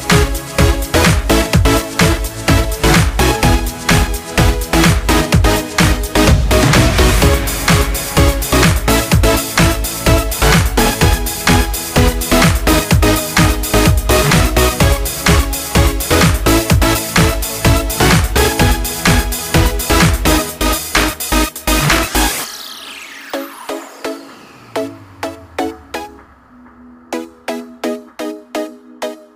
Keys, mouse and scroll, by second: 0.0 click, 4.4-19.2 drag, 19.4-28.6 drag, 29.2 click, 29.3 click.